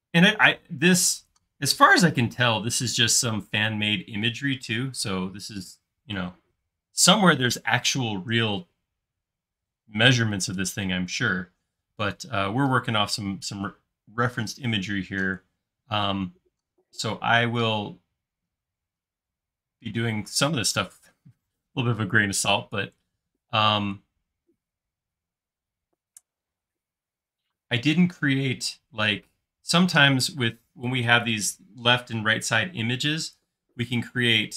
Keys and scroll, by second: 16.9 l.